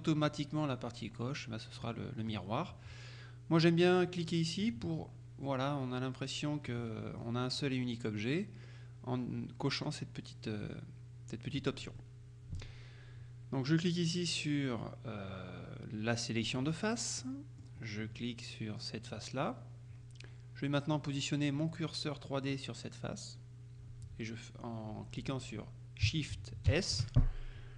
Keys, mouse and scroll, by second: 1.7 scroll down 2, 1.9 middle click, 4.7 click, 6.9 middle click, 12.1-13.2 middle drag, 16.6 click, 17.3 middle click, 17.9-18.5 scroll up 1, 19.2 right click, 26.8 shift+s.